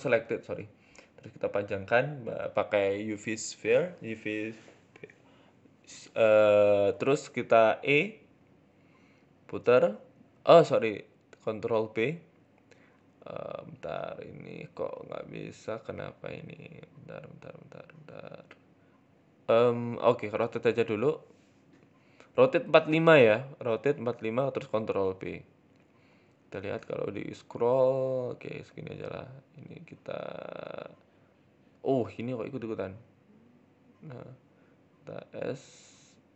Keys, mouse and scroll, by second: 0.0 shift+middle click, 0.4 s, 1.5 shift+middle click, 2.2 Tab, 2.5 click, 2.8 shift+middle click, 3.9 e, 4.8 r, 7.1 shift+middle click, 7.1 g, 8.5 click, 9.7 ctrl+b, 13.0 ctrl+z, 13.2-13.9 scroll up 2, 13.5 shift+middle click, 13.9 right click, 14.2 alt+shift+right click, 15.0 ctrl+b, 17.7 ctrl+z, 18.8 ctrl+shift+z, 19.3 r, 20.3 ctrl+b, 22.1 scroll down 3, 22.3 shift+middle click, 23.2 ctrl+z, 23.9 ctrl+b, 27.8 shift+middle click, 28.1-28.9 scroll up 2, 28.9 right click, 29.0 alt+shift+right click, 30.2 shift+middle click, 30.9 g, 31.9 middle click, 32.5 ctrl+z, 33.3 right click, 33.5 alt+shift+right click, 34.1 KP_1, 34.8 shift+middle click.